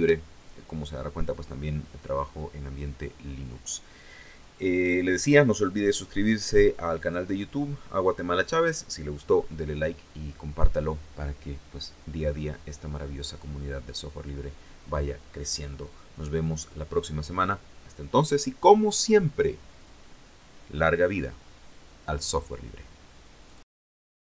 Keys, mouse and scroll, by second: 23.0 click, 24.3 click.